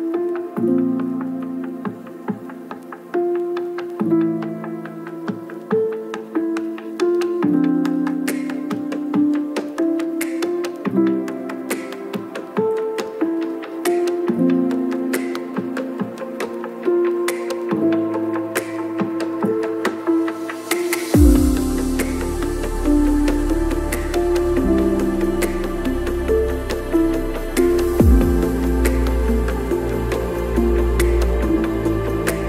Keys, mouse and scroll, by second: 2.1 click, 2.4 click, 3.0 right click, 3.3 click, 4.1 ctrl+middle click, 4.4 click, 5.1 shift+middle click, 5.4 click, 6.3-6.6 scroll, 6.6 click, 7.6 click, 10.0 click, 15.9 click, 15.9 KP_0, 16.4 click, 17.4 shift+click, 18.0 click, 18.2 KP_0, 19.5 click, 20.7 click, 20.9 middle click, 21.3 middle click, 21.4 click, 21.7 middle click, 29.7 click, 29.8 click, 30.1 click, 31.0 click, 32.2 click.